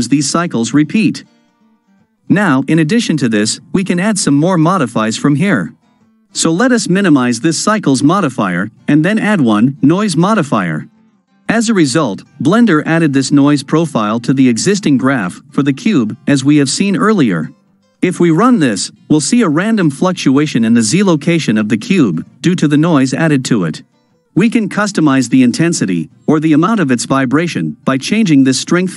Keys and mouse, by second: 4.6 click, 8.8-10.2 drag, 17.3 shift+Left, 17.8 space, 26.7 space.